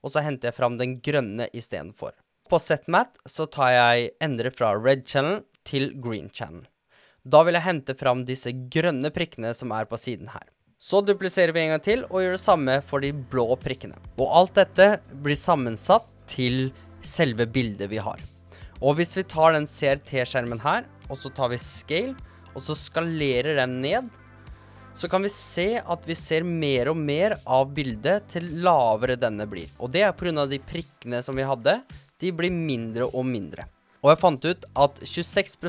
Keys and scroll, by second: 11.0 super+d, 22.5 s.